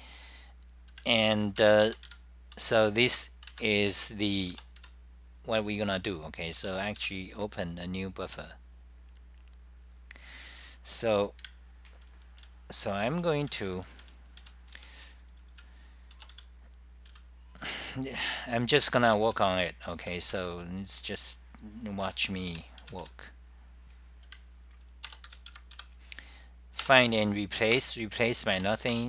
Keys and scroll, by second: 1.1 super+=, 1.8-2.6 typing, 4.0 super+=, 9.7-10.4 typing, 11.5 ctrl+shift+Tab, 12.8-13.5 typing, 15.7-20.4 typing, 21.6-23.5 typing, 24.4 super+=, 24.5-25.3 typing, 25.5 Home, 26.9 Return, 27.2-29.0 typing.